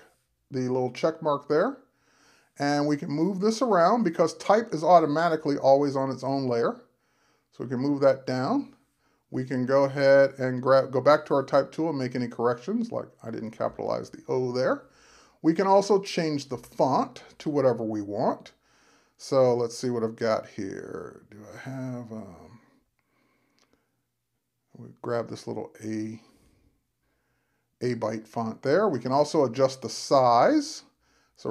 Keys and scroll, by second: 14.0 shift+o.